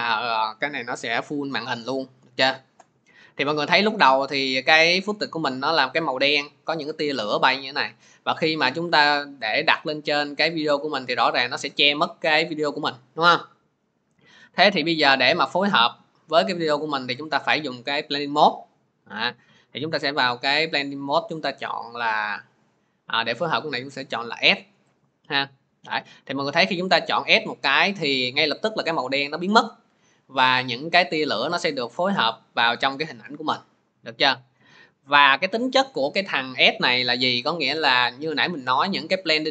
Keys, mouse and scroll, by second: 8.9-10.5 drag, 11.2 click, 16.5 click, 17.1 click, 21.1 click, 23.1 click, 24.8 click, 26.1-29.9 drag, 30.9-37.0 middle drag.